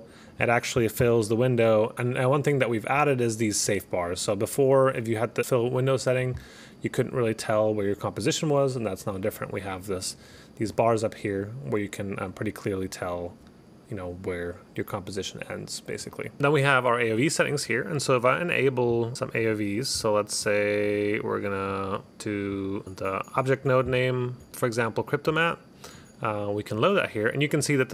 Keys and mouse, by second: 2.6 click, 5.4 click, 16.2 click, 17.2 click, 17.7 click, 19.3 click, 19.5 click, 20.5 click, 21.0 click, 21.4 click, 23.5 click, 26.2 click, 26.9 click.